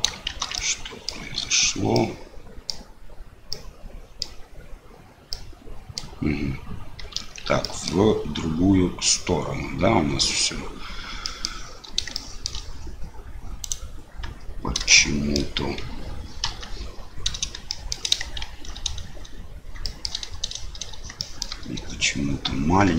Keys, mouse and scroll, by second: 0.2 shift+z, 0.5 middle click, 1.9 middle click, 3.5 middle click, 5.3 middle click, 7.1 shift+z, 7.6 middle click, 11.2 middle click, 12.1 shift+middle click, 13.6 click, 14.8 shift+middle click, 16.4 KP_7, 17.6 shift+click, 18.4 shift+z, 19.8 shift+click, 21.1 shift+click.